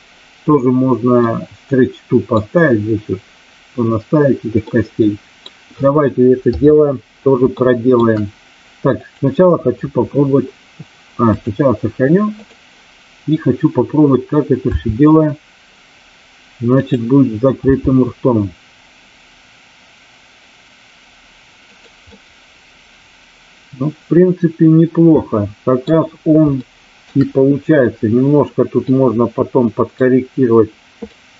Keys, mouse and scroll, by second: 1.1-2.2 middle drag, 4.6-5.4 middle drag, 6.4 KP_3, 7.4-7.8 shift+middle drag, 8.8 click, 11.2-12.4 drag, 14.7 r, 16.8 click, 17.6 g, 21.7 click, 22.0-26.0 middle drag, 26.6-27.1 shift+middle drag, 28.8-29.6 middle drag, 31.1-31.3 middle drag.